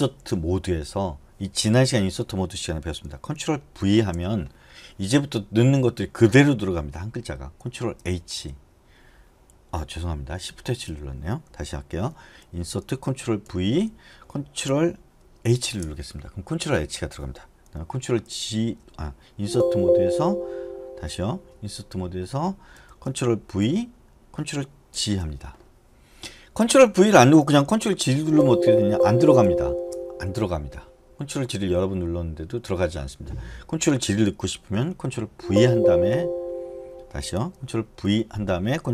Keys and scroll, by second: 4.0 ctrl+v, 8.2 h, 11.0 BackSpace, 13.7 ctrl+v, 15.7 ctrl+h, 19.8 i, 23.0 BackSpace, 23.8 ctrl+v, 25.1 ctrl+g, 35.7 ctrl+v.